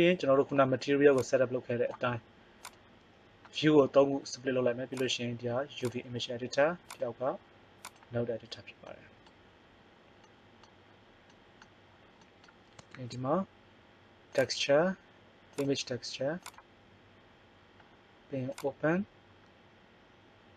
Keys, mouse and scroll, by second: 8.8-10.7 middle drag, 12.9 shift+a, 17.8 middle click, 18.4 click.